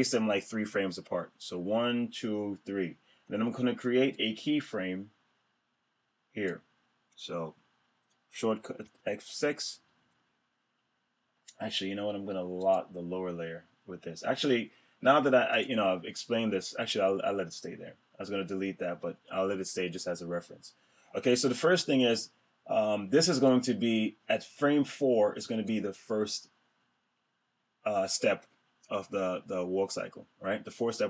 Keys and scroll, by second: 8.6 F6.